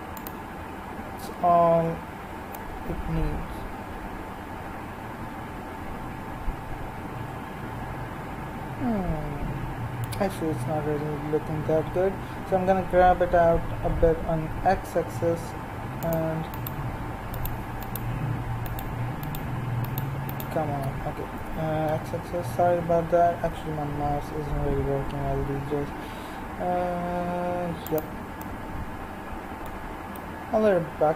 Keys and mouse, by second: 1.7 z, 11.4 g, 16.5-24.3 right drag, 21.3 g, 28.5 middle click, 29.2-31.1 middle drag.